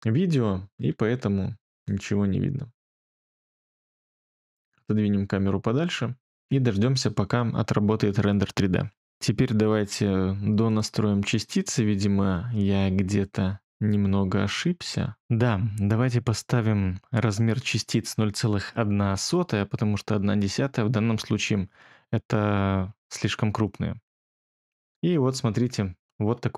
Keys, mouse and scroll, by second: 19.1 0, 25.7 ctrl+middle click.